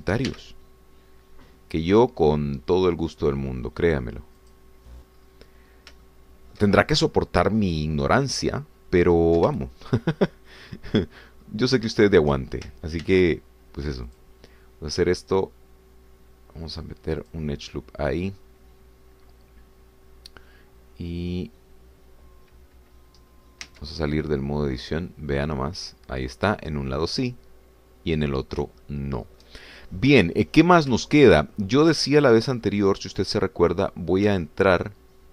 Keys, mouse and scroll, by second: 0.1 shift+click, 0.8 shift+s, 1.3 shift+y, 5.5 click, 6.2-6.5 scroll down 1, 7.1 shift+middle click, 10.0-10.4 scroll up 1, 10.6-12.2 shift+middle drag, 12.4 shift+scroll up 1, 13.0 shift+middle click, 14.1 ctrl+r, 15.1 click, 18.2 click, 24.3-24.7 scroll down 2, 24.7 Tab, 25.6-25.9 scroll down 2, 26.1-29.7 middle drag, 29.8 shift+middle click, 30.7 shift+scroll down 1, 31.1 middle click, 32.1 shift+middle click, 32.5 shift+scroll up 3, 33.6-35.3 middle drag.